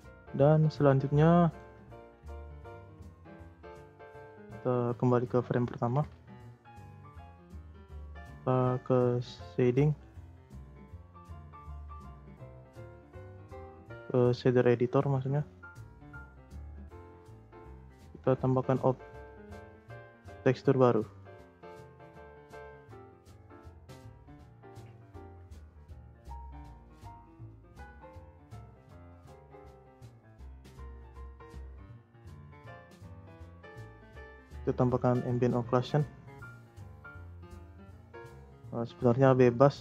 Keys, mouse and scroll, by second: 0.0-0.4 scroll up 7, 0.4-1.0 scroll down 1, 1.0-1.8 middle drag, 1.8-2.4 scroll up 1, 2.4-3.2 shift+scroll up 1, 3.2-4.4 drag, 4.4-4.8 scroll down 3, 4.8-6.1 shift+scroll up 6, 4.8-5.3 shift+middle drag, 5.5-5.9 shift+middle drag, 6.1 shift+s, 6.7 Tab, 7.4 Tab, 9.8-13.0 drag, 14.8 click, 15.4 scroll down 2, 16.9 click, 18.6 click, 19.1-20.4 scroll up 33, 20.4-21.4 middle drag, 21.4 click, 21.6 scroll down 2, 21.9 middle click, 22.4 z, 23.2-23.5 scroll up 4, 23.5 middle click, 23.9 scroll up 1, 24.1 click, 24.3 shift+a, 27.0 click, 27.8 middle click, 28.3-29.0 scroll up 6, 29.0-29.6 scroll down 2, 29.6-30.0 scroll up 2, 30.0 click, 33.2 click, 33.5 scroll down 3, 33.8-34.2 middle drag, 34.9-36.5 middle drag, 36.5 click, 37.0 middle click, 37.2-37.7 scroll up 2, 37.7 click, 38.2 click, 38.4 middle click, 38.8-39.7 scroll down 2, 39.7 middle click.